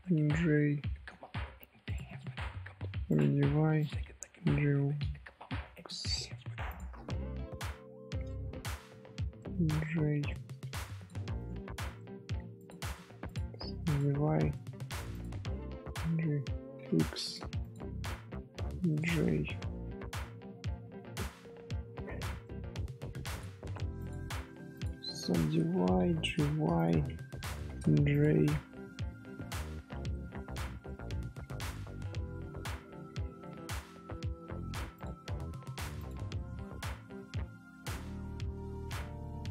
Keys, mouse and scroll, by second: 0.0-1.6 middle drag, 1.6 2, 1.8 click, 3.6 1, 3.7 click, 6.6 shift+click, 7.8 j, 8.2-10.6 middle drag, 10.6 scroll up 1, 10.7 2, 10.9 click, 11.9 scroll down 1, 11.9 middle click, 12.5 click, 13.6 1, 13.8 click, 14.5 middle click, 15.1 click, 17.6 shift+click, 18.6 j, 18.9-21.9 middle drag, 22.4 middle click, 22.9 2, 23.2 click, 23.6 right click, 24.2 1, 24.7 click, 26.7 shift+click, 27.5 j, 28.1 click, 28.6 scroll up 1, 28.8 middle click, 29.5-30.0 scroll down 2, 30.0 middle click, 30.5 scroll down 1, 30.5 scroll up 1, 30.8-32.2 middle drag, 32.2 Tab, 34.9 click, 36.0 click, 36.3-38.0 middle drag, 38.0 Tab, 38.3 middle click, 38.7-39.5 scroll up 2.